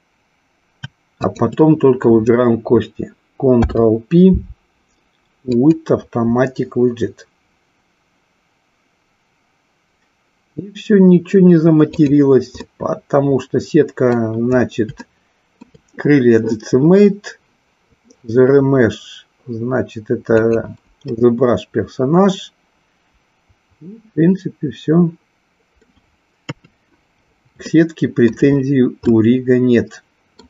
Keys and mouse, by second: 1.1 shift+click, 3.5 ctrl+p, 12.8-14.4 middle drag, 15.0-15.8 shift+middle drag, 21.0-26.0 middle drag, 26.5 KP_3, 27.8-28.4 shift+middle drag, 29.1-30.4 shift+middle drag.